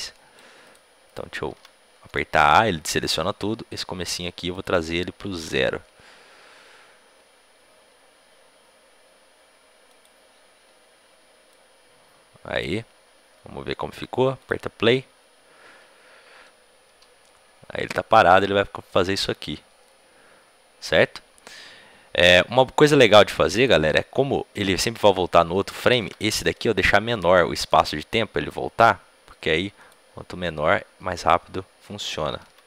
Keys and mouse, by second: 0.6 b, 4.7 a, 4.7 g, 11.5-16.2 drag, 23.5-27.8 drag, 27.8 a, 27.8 b, 27.8 g.